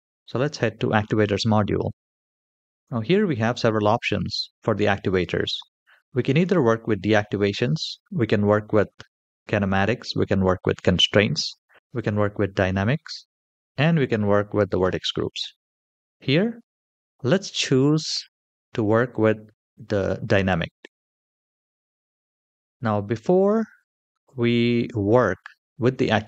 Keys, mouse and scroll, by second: 2.6 click, 2.7 middle click, 3.9-4.3 middle drag, 17.4 click, 23.3-23.6 shift+middle drag, 24.0 middle click.